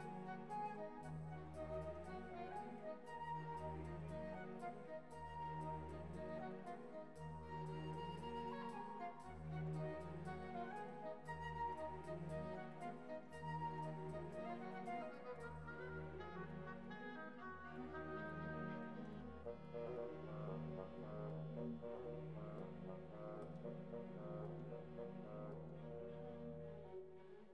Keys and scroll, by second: 0.3 2, 0.5 0, 1.0 1, 1.3 0, 1.5 Return.